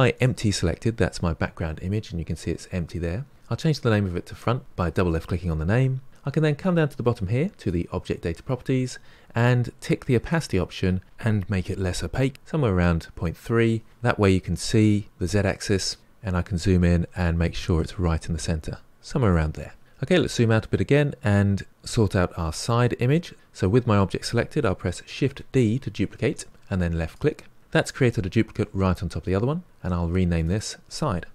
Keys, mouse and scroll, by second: 0.1 click, 3.3 click, 3.8 click, 7.5 click, 10.2 click, 11.0-13.8 drag, 16.3-17.3 scroll up 5, 17.3 g, 19.9-23.3 scroll down 7, 23.3 click, 25.2 shift+d, 30.0-31.3 drag.